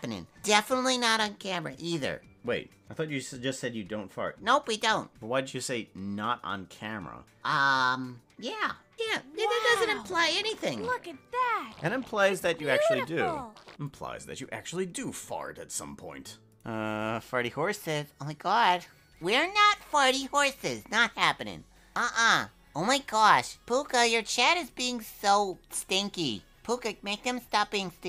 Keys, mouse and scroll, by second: 14.0 click, 14.6 space, 15.2 space.